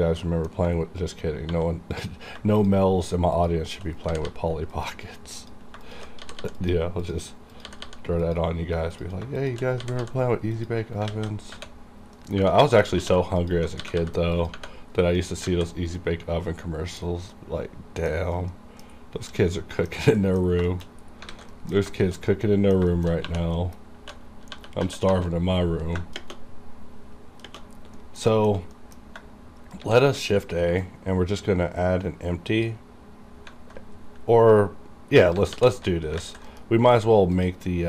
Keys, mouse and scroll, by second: 0.0 scroll down 1, 0.3 middle click, 0.8-1.5 scroll up 1, 1.5 1, 2.0 click, 2.6 shift+click, 4.1 g, 4.3 g, 4.7 click, 5.9 shift+click, 6.2 g, 6.4 g, 6.6 click, 7.6 g, 7.9 g, 8.2 click, 8.3 click, 9.3 shift+click, 9.8 g, 10.0 g, 10.5 click, 11.1 alt+a, 11.5-12.2 scroll down 2, 12.2 middle click, 12.7 shift+middle click, 12.9 scroll up 1, 13.0 2, 13.4 alt+click, 13.8 g, 14.0 g, 14.3 click, 14.4 click, 14.9 scroll down 1, 15.2 middle click, 15.5 alt+a, 15.9 scroll down 1, 16.0 middle click, 17.0-17.3 scroll down 1, 17.3 middle click, 18.5 middle click, 18.8 scroll down 1, 19.6 middle click, 20.0-21.3 scroll down 4, 20.2 middle click, 20.2 middle click, 20.7 shift+middle click, 21.3 alt+a, 21.5 middle click, 21.8 scroll down 1, 22.1 shift+middle click, 22.3 middle click, 22.7 scroll down 1, 22.9 middle click, 23.2 2, 23.6 middle click, 24.0 1, 25.1 typing, 26.1 shift+space, 27.7 scroll down 1, 28.0 middle click, 28.3 shift+middle click, 28.7 middle click, 29.8 shift+a, 30.8-35.5 drag, 35.5 alt+g, 36.2 alt+z, 36.5 KP_Decimal, 36.9 right click, 37.3 click.